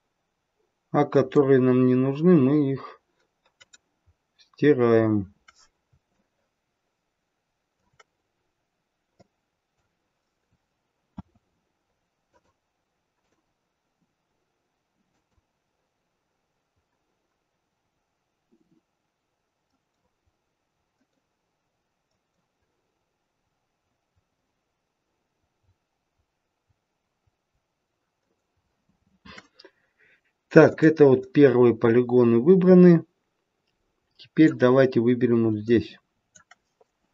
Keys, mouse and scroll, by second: 4.0-4.6 scroll up 1, 4.6 scroll down 1, 5.0-6.1 scroll down 1, 6.1 shift+middle click, 8.2 scroll up 1, 8.7-9.2 scroll down 1, 9.2 middle click, 11.1 c, 31.2 middle click, 35.6 middle click.